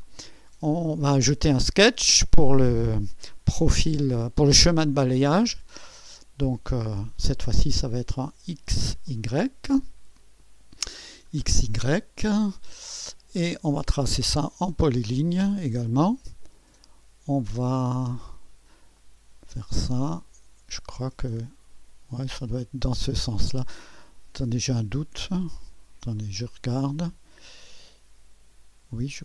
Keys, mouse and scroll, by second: 0.0-1.0 drag, 5.9 click, 7.8-8.9 drag, 9.0 click, 9.9-10.8 scroll down 2, 10.8-11.7 scroll down 1, 11.7-13.1 drag, 13.1 right click, 14.6-17.7 drag, 18.9-20.0 drag, 21.3-23.5 middle drag, 26.1-29.2 drag.